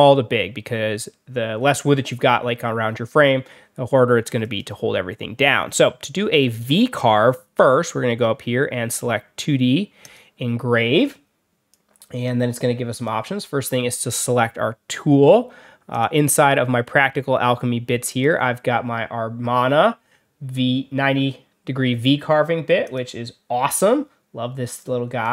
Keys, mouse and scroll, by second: 4.3 click, 9.9 click, 11.6 click, 12.8 click, 15.8 click, 18.0 click, 22.7 click, 24.7 click.